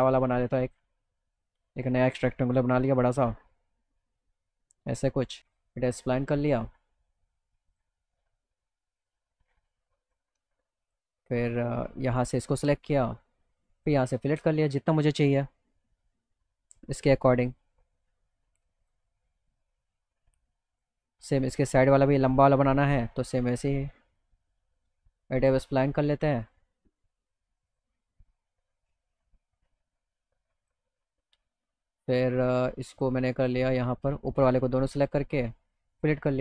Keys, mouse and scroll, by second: 0.5 click, 1.4 drag, 3.8-5.4 drag, 5.4 e, 7.7 click, 10.1 click, 10.9 click, 12.2 click, 14.6-17.5 drag, 18.8 click, 20.7 click, 22.3-24.2 drag, 26.5 click, 27.7 click, 28.6 e, 30.7 click, 33.0 click, 33.4 click, 34.3 click, 36.0 click.